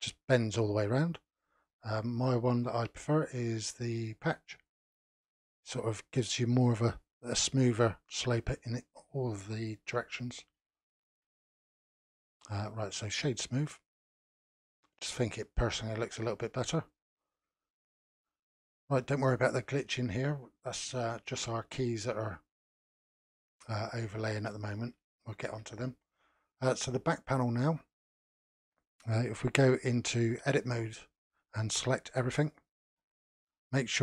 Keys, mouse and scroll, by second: 2.5-5.5 drag, 8.9-9.7 scroll down 2, 9.7-12.4 middle drag, 12.4-13.7 right drag, 13.7 scroll down 2, 14.1-15.9 middle drag, 15.9-16.4 scroll down 4, 16.9-22.2 shift+middle drag, 22.2 click, 22.9 click, 24.6 scroll up 1, 25.1-27.1 shift+middle drag, 27.1 click, 29.8 click, 30.7 Tab, 30.8-32.1 middle drag, 32.1 a, 32.9-34.0 middle drag.